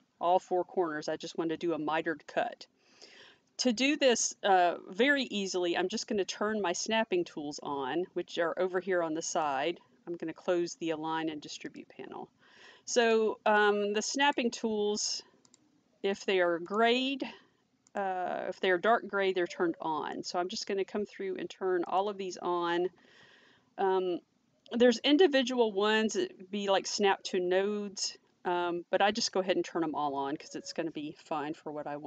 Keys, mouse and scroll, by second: 9.3 click, 11.7 click, 13.5 click, 16.7 click, 17.9 click, 20.1 click, 21.9 click, 30.1-30.4 scroll up 1.